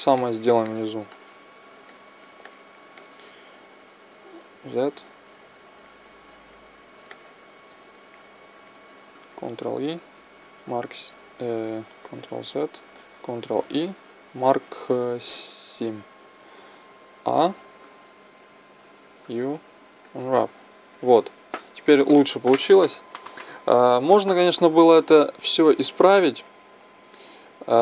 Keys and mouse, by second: 0.0 middle click, 4.4-7.6 middle drag, 4.4 z, 7.6 click, 7.8-9.5 right drag, 9.5 ctrl+e, 9.7 click, 12.1 ctrl+z, 13.5 ctrl+e, 16.9 a, 17.3 a, 19.1 u, 20.9-27.6 middle drag, 27.6 click.